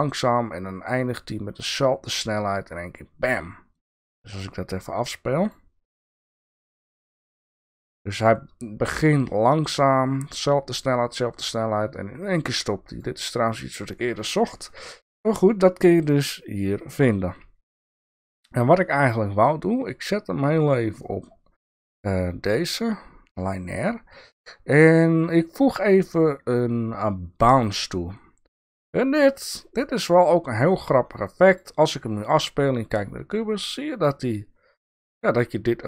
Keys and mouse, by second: 4.3 click, 5.4 click, 6.0 click, 8.2 click, 9.0-13.0 drag, 14.1-21.1 drag, 22.0-27.6 drag.